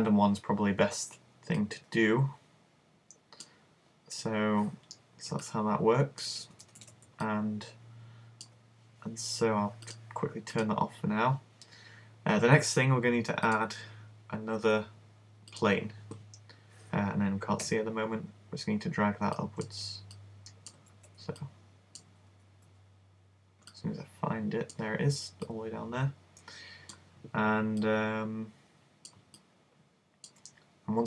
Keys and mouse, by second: 1.7 click, 6.5 super+z, 6.7 super+z, 6.8 super+z, 9.9 click, 10.1 click, 13.5 click, 17.7 z, 19.6-21.5 drag, 19.6 right click, 21.0 z, 22.3 super+z, 22.7 super+z, 26.2 click, 27.9-29.4 drag, 29.4 middle click.